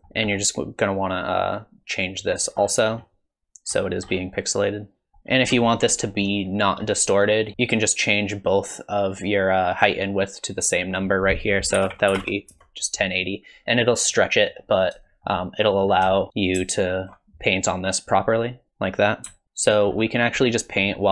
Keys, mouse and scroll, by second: 0.0 click, 0.0-0.9 scroll up 4, 1.1 click, 2.6-3.1 scroll down 5, 2.9-3.3 scroll up 2, 3.7-5.0 scroll up 9, 5.0 scroll down 1, 5.1 middle click, 5.3 scroll up 1, 5.6 shift+middle click, 7.2 middle click, 7.5 scroll up 9, 10.7 click, 14.1 middle click, 15.1 shift+middle click, 15.9 scroll down 3, 16.2 shift+middle click, 16.8 ctrl+shift+click, 17.5 click, 19.4 ctrl+z, 19.4 middle click, 19.7 middle click, 20.1-20.5 scroll down 5, 20.5 middle click.